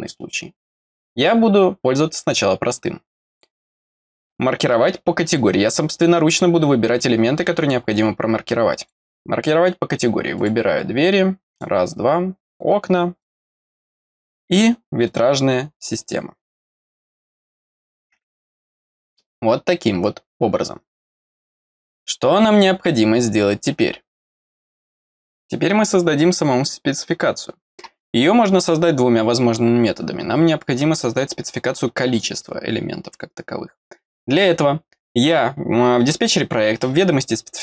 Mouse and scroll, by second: 3.3 click, 8.7 click, 10.3-11.6 drag, 12.4 click, 13.2-15.1 drag, 16.9 right click, 17.5 click, 21.6 middle click.